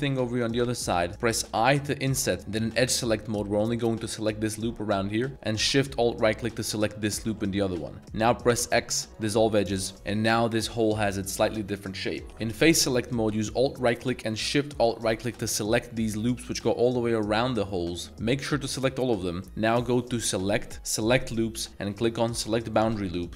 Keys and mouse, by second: 0.4 ctrl+shift+click, 1.0 middle click, 1.0 z, 1.5 i, 2.4 z, 2.6 2, 3.6 alt+click, 4.9-5.3 middle drag, 6.5 alt+shift+click, 7.4 middle drag, 7.4 z, 7.7 z, 8.5 x, 9.9 Tab, 9.9 middle drag, 11.1-12.1 middle drag, 12.3 3, 13.7 alt+click, 14.9 alt+shift+click, 15.6 middle drag, 15.8 z, 16.4 middle drag, 17.1 z, 18.1 z, 18.2 middle click, 19.0 middle drag, 19.3 z, 20.3-22.8 drag.